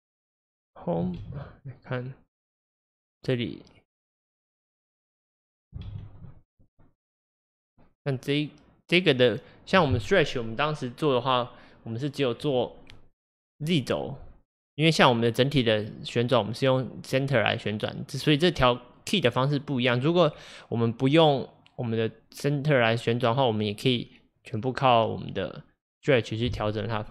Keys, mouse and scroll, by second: 1.0 click, 1.2 Home, 2.7 click, 4.1 click, 5.9 Home, 6.7 click, 7.4-26.7 drag.